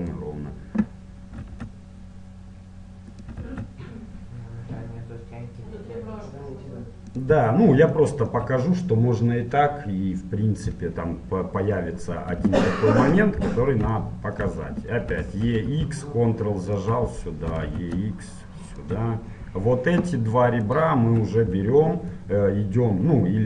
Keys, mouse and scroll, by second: 0.1-1.9 right drag, 1.4 e, 3.5 e, 8.0-9.7 middle drag, 12.7-15.8 middle drag, 15.2 e, 17.5 e, 20.7-22.6 right drag.